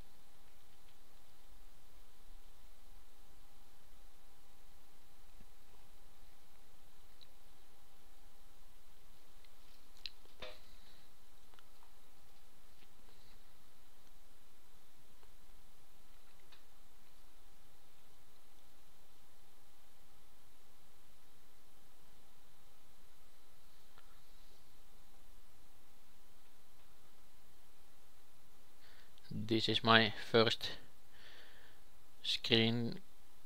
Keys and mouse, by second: 0.3 s, 1.4 g, 3.1 g, 4.2 a, 4.9-6.6 drag, 7.5-9.3 drag, 8.0 shift+d, 9.4 g, 11.4 s, 12.2 g, 15.9-19.0 drag, 16.3 shift+s, 17.2 shift+a, 20.0 g, 21.1 r, 22.9 s, 23.9 g, 25.6 s, 26.8 g.